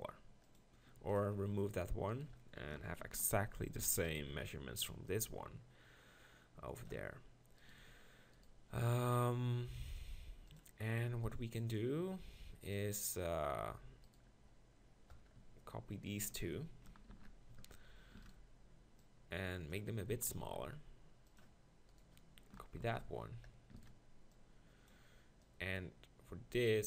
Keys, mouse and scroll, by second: 0.5-1.7 drag, 1.0 x, 3.0 ctrl+l, 3.8 shift+d, 5.1 click, 7.8 z, 10.5 click, 12.8 z, 14.1-15.9 drag, 16.6 shift+click, 17.1 ctrl+shift+l, 18.2 shift+d, 19.0-20.3 drag, 19.0 right click, 20.1 s, 22.8 ctrl+l, 23.8 shift+d, 24.4 click, 26.7 click.